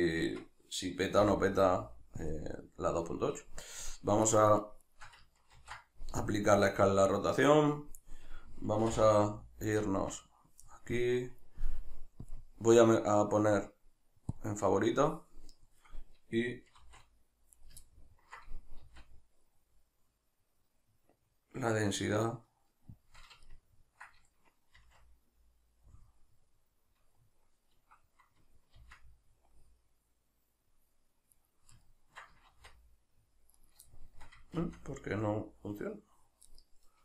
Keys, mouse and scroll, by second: 0.2 Tab, 1.1 n, 2.2-4.2 drag, 4.2 shift+right drag, 4.5 shift+right drag, 4.8 shift+right click, 5.5 ctrl+a, 7.1 right click, 8.8 n, 9.8 Tab, 11.0-12.2 middle drag, 12.2-17.6 drag, 16.8 shift+r, 17.6 right click, 17.9-24.8 ctrl+middle drag, 18.8 shift+r, 24.8 shift+r, 28.0 Escape, 28.8-31.4 middle drag, 28.8 shift+r, 31.4 right click, 32.5 shift+r, 33.7 right click, 33.9-36.5 shift+middle drag, 34.5 shift+r, 36.5 right click.